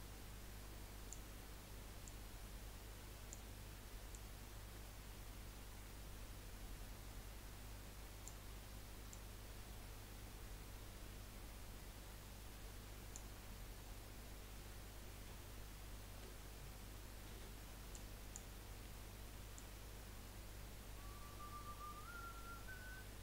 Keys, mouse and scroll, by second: 2.0 click, 4.1 click, 9.1 click, 13.9 scroll down 2, 15.3 z, 17.3 1, 18.0 click, 19.5 click.